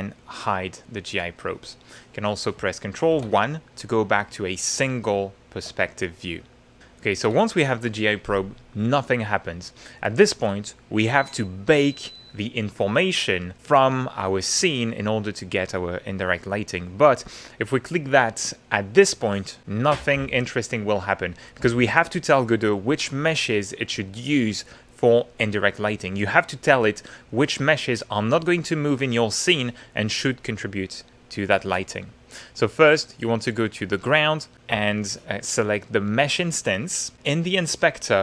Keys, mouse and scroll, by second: 0.0 click, 1.2 click, 1.9 middle click, 3.1 ctrl+1, 4.1 middle click, 5.8-7.3 shift+middle drag, 33.8 click.